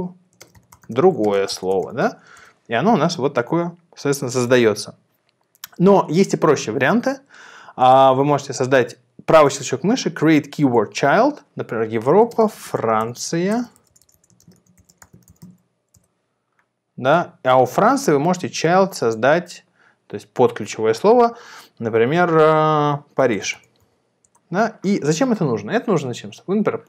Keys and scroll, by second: 0.0-2.2 typing, 2.3 Return, 12.2-15.8 typing, 16.0 Return, 22.9-24.4 typing.